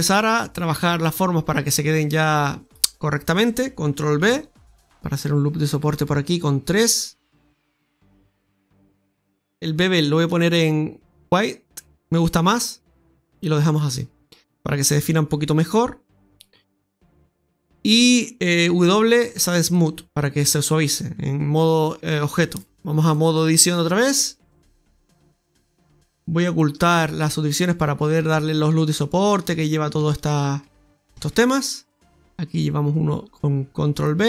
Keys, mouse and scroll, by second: 1.0 click, 2.0 right click, 2.3 alt+shift+right click, 4.1 ctrl+b, 10.2 click, 13.2 click, 16.6 Tab, 17.2 middle click, 18.6 w, 21.7 click, 23.8 scroll down 1, 24.0 middle click, 26.3 click, 26.7 scroll up 1, 28.0 right click, 28.4 alt+shift+right click, 29.6 right click, 30.0 alt+shift+right click, 31.1 ctrl+b.